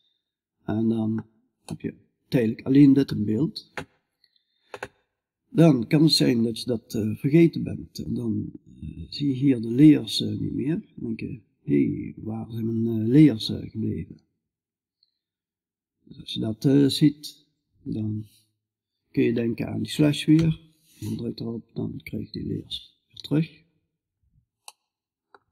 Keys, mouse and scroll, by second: 19.8 KP_Divide, 23.1-25.5 middle drag.